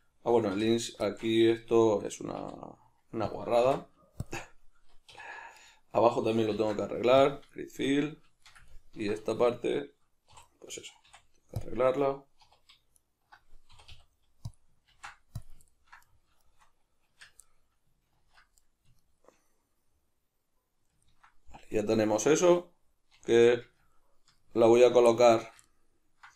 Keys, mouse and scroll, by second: 0.5 3, 0.7 right click, 1.0-3.4 shift+middle drag, 3.4 click, 3.6 x, 5.1 2, 5.6 alt+right click, 6.5 ctrl+f, 7.6-10.5 shift+middle drag, 10.3 3, 10.5 right click, 11.1 x, 12.5 2, 13.0 alt+right click, 13.7 e, 14.6 click, 14.9 ctrl+f, 15.7-26.3 ctrl+middle drag, 17.1 Tab, 18.2 ctrl+2, 23.3 alt+q.